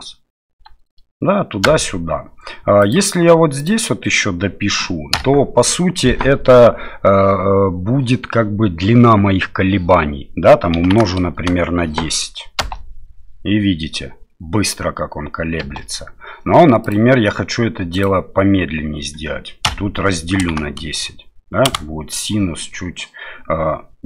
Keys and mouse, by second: 1.6 space, 2.8-11.9 drag, 12.6 space, 17.0-22.3 drag, 17.0 space.